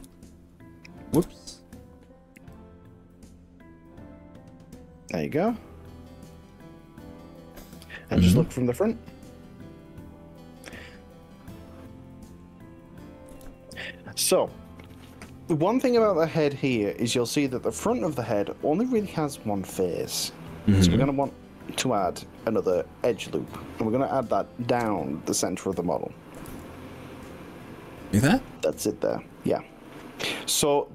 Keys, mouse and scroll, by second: 0.0 KP_1, 1.2 KP_3, 2.4 s, 6.3 click, 9.4-12.5 middle drag, 13.3 KP_1, 17.3-23.8 middle drag, 24.8 KP_1, 26.5 ctrl+r.